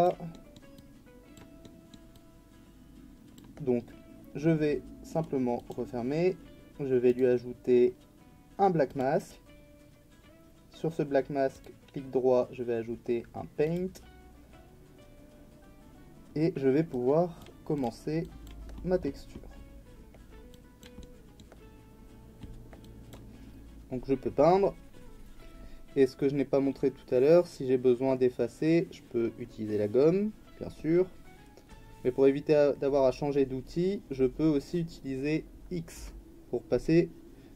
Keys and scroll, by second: 36.0 x, 37.3 x.